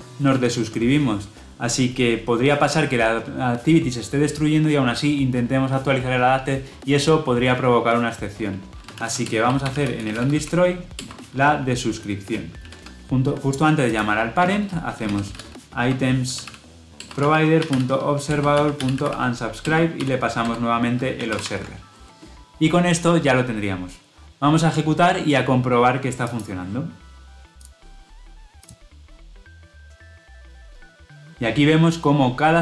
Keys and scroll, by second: 10.9 Return, 16.9 Return, 21.1 Return, 21.2 ctrl+alt+l, 25.3 ctrl+alt+o, 26.2 shift+F10.